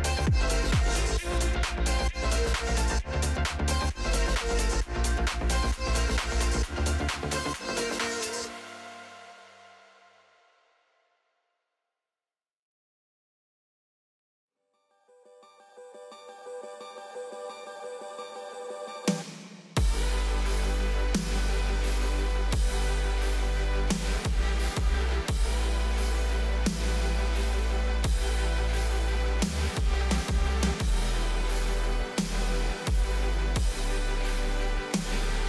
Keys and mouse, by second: 0.6 y, 0.7 y, 2.3 click, 2.7 shift+click, 3.2 g, 7.0 click, 7.2 g, 10.6 r, 15.6 click, 16.4 g, 18.5 x, 18.5 x, 18.6 x, 19.2 g, 23.0 r, 25.6 ctrl+s, 26.7 click, 27.4 z, 28.6 click, 30.1 z, 30.9-32.0 drag, 32.0 KP_1, 34.0 alt+d, 34.9 s.